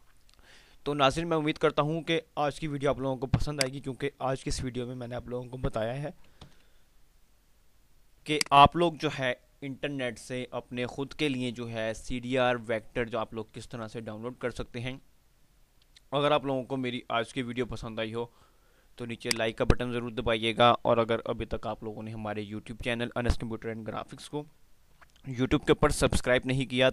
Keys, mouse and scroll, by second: 3.7 click, 7.8 click, 15.5-15.8 scroll down 1, 19.4 click.